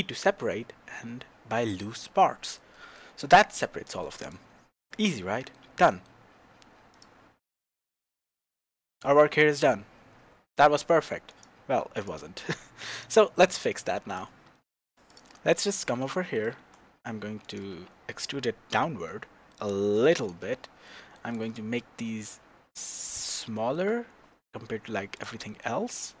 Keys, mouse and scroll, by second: 3.2 Tab, 4.2 click, 4.6 scroll down 2, 5.0 scroll up 2, 5.3-6.9 shift+middle drag, 6.9 click, 11.9 click, 12.9 click, 13.4 click, 14.1 click, 14.5 shift+middle click, 15.1 click, 15.3-17.4 middle drag, 15.7 Tab, 16.6 e, 17.6 click, 17.7 Tab, 18.2-20.1 middle drag, 20.1 click, 20.8-21.3 middle drag, 21.3 click, 22.0 s, 24.8 Escape, 25.1 click, 25.5-26.2 middle drag.